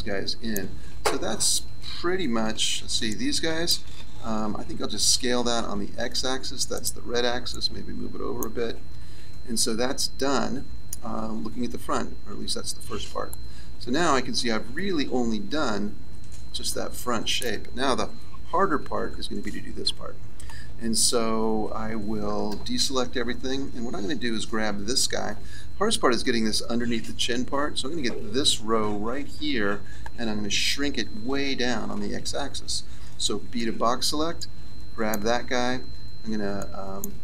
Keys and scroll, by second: 1.8 a, 18.3 KP_3, 22.7 a, 33.6 b.